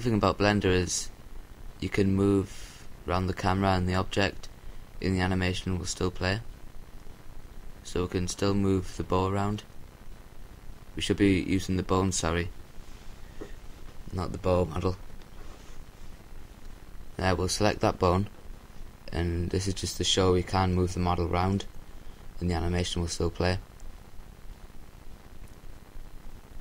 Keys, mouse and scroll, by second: 4.0-5.2 right drag, 8.8-11.8 right drag, 12.7-14.2 right drag, 13.6-15.4 middle drag, 16.6-17.8 right drag, 25.6 KP_7.